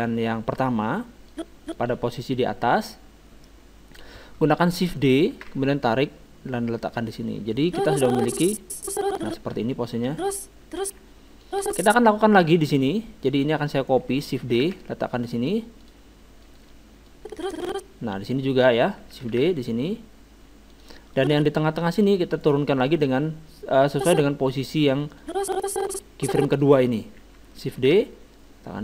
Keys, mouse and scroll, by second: 1.3-3.0 drag, 5.3 shift+d, 7.7-9.4 drag, 9.5-11.5 middle drag, 10.1 alt+a, 11.0 alt+a, 11.5-13.4 drag, 13.8-15.5 right drag, 14.6 shift+d, 16.4-18.8 drag, 19.3 shift+d, 21.2-22.9 drag, 22.4-24.2 right drag, 23.9-26.8 drag, 27.8 shift+d.